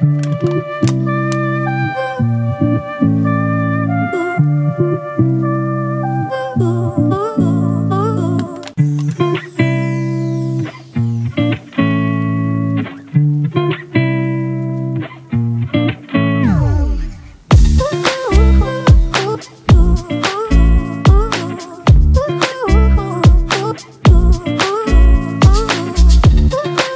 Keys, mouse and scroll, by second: 22.5 ctrl+t, 23.4 alt+shift+click, 24.6 alt+shift+click, 26.6 alt+shift+click.